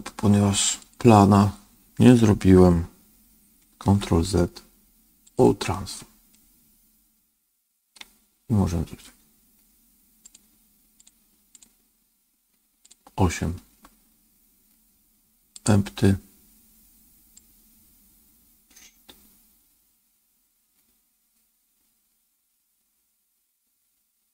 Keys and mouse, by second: 3.7 ctrl+a, 6.2-7.9 middle drag, 10.1 click, 10.9 click, 12.8 click, 15.4 click, 17.4-24.3 drag.